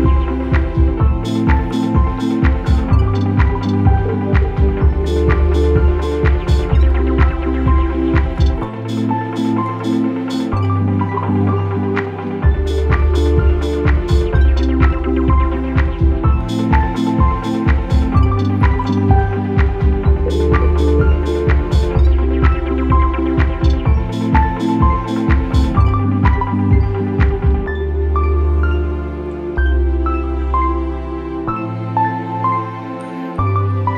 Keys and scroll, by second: 0.6 ctrl+[, 1.2 Delete, 7.7 p, 9.2 ctrl+-, 15.4 p, 25.0 p, 29.8 ctrl+z, 30.1 ctrl+=.